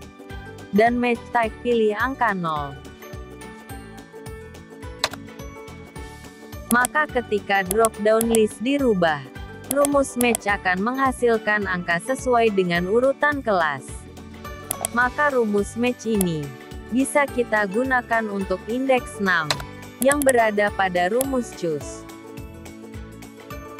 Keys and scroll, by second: 16.8 ctrl+x, 21.9 ctrl+v.